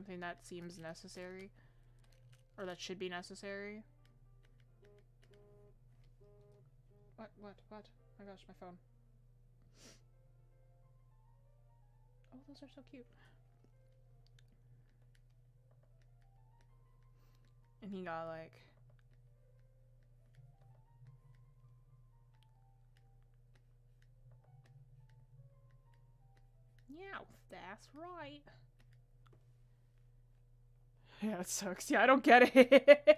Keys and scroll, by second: 18.8 ctrl+z.